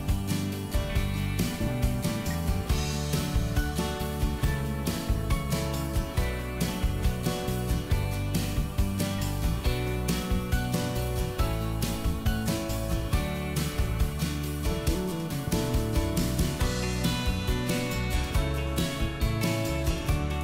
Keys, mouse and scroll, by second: 0.5 middle click, 1.7 m, 2.4 click, 3.4 Up, 5.3 click, 5.7 middle click, 7.0-7.3 scroll down 1, 7.5 shift+middle click, 9.4 click, 11.1 s, 11.4 middle click, 14.0 ctrl+click, 14.3 middle click, 15.6-17.9 scroll down 1, 17.9 middle click, 19.4-20.4 drag.